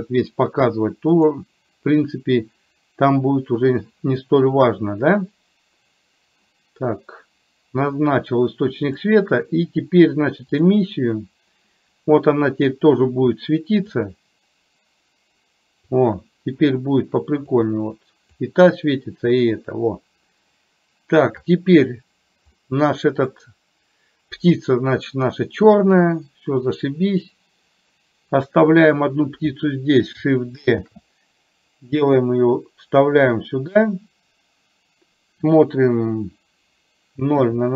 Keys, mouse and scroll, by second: 1.2-1.7 drag, 9.0-10.9 drag, 14.0-16.0 drag, 17.7 click, 21.6 click, 22.7 middle click, 27.0-29.1 middle drag, 31.1 shift+d, 37.5 KP_0.